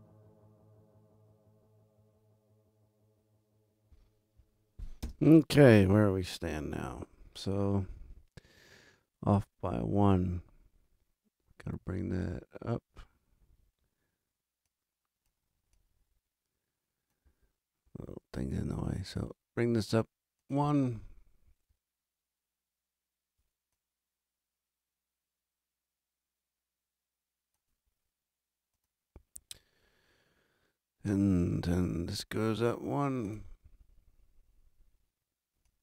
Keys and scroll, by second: 5.4 super+space, 5.6 super+=.